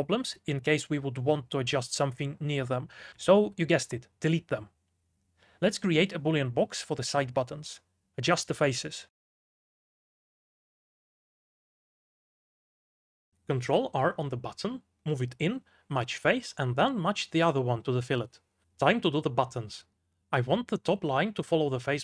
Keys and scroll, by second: 0.2 shift+w, 2.2-5.0 typing, 3.3 ctrl+z, 6.0 x.